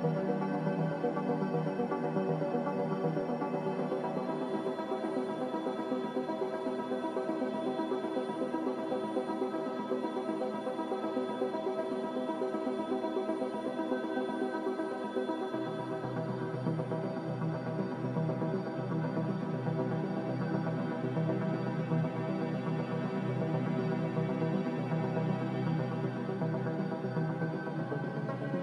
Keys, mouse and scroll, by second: 3.7 g, 5.5 z, 7.0-8.5 typing, 17.6 z, 18.5 Delete, 19.6 Delete.